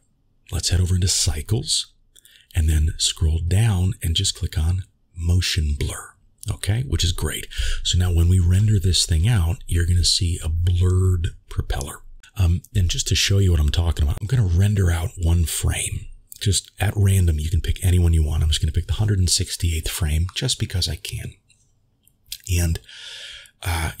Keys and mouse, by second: 6.0 click, 9.9 click, 12.8 click, 16.6-19.3 drag, 20.8-24.0 drag.